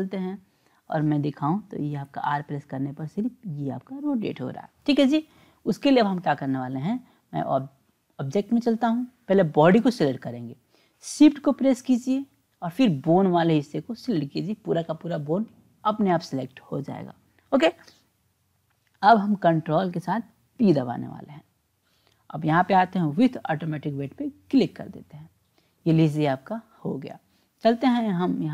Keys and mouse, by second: 0.5 click, 2.1 r, 7.5 click, 9.7 click, 13.4 shift+click, 20.6 ctrl+p, 27.7-28.5 drag.